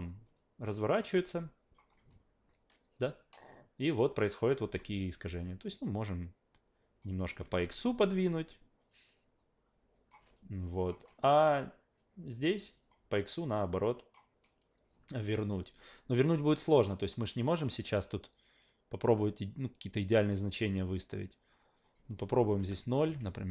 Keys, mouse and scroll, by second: 0.3-1.0 drag, 1.2 alt+click, 1.9 alt+middle click, 3.1-4.5 drag, 4.9 w, 6.0-7.0 drag, 8.9-10.1 drag, 10.3-10.9 alt+drag, 11.1 alt+middle drag, 12.0-12.9 drag, 13.8 click, 16.9-19.0 drag, 21.7 click, 23.1 Tab.